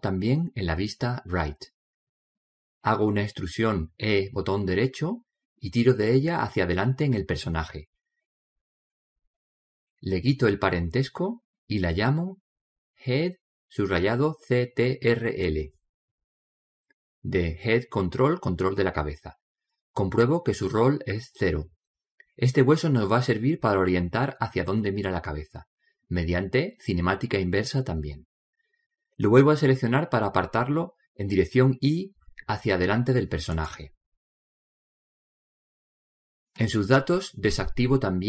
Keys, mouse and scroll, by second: 4.4 e, 6.2 click, 10.3-12.4 middle drag, 12.0-15.0 drag, 20.3-24.6 middle drag, 31.4 right click, 33.0 click, 33.9-36.6 middle drag, 35.0 click, 37.1-38.2 drag.